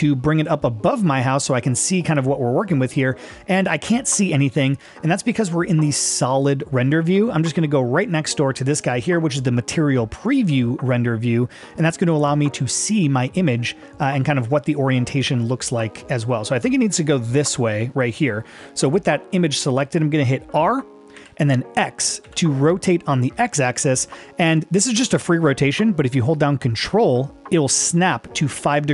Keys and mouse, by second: 2.4-3.0 middle drag, 14.3-19.1 middle drag, 21.2 r, 22.2 x.